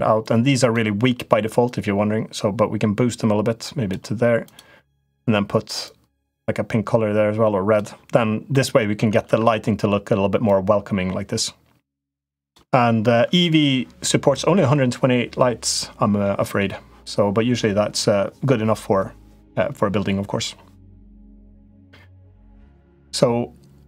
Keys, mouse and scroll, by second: 0.1 click, 1.4-3.7 drag, 4.2 click, 8.2 middle click, 9.0 Tab, 10.2-12.3 drag.